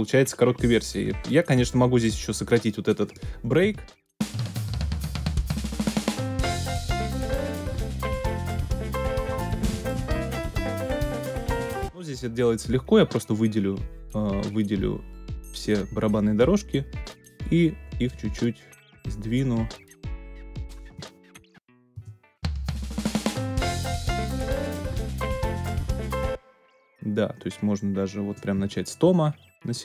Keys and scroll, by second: 3.7 space, 11.5 space, 21.9 ctrl+space, 22.5 alt+super+space, 25.9 space.